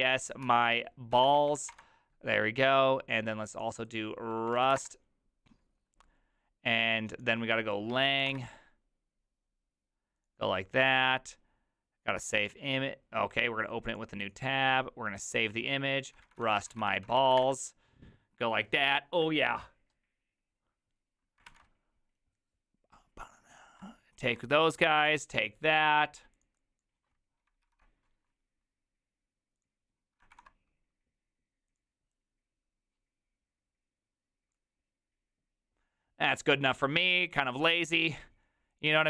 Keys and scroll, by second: 0.0-2.2 typing, 4.3-5.2 typing, 7.7-8.7 typing, 15.9-17.8 typing, 21.5 alt+=, 27.7 ctrl+c, 30.4 ctrl+v.